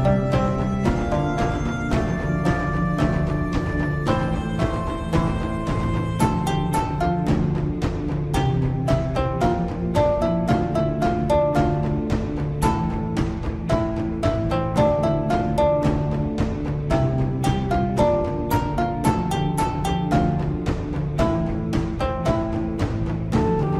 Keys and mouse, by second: 2.6 z, 16.2 s, 18.5 g.